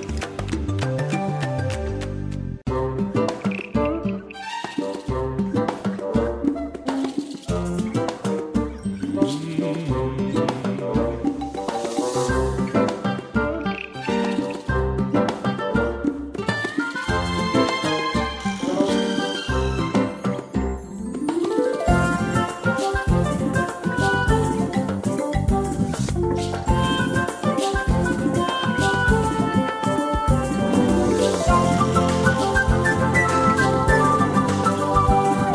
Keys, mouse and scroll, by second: 13.0 click, 16.3 space, 18.6 click, 22.1 click, 28.4 click.